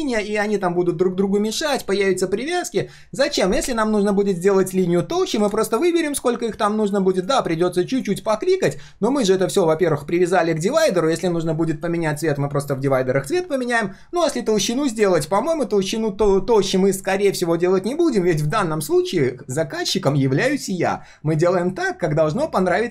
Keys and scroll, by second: 4.1 ctrl+shift+4.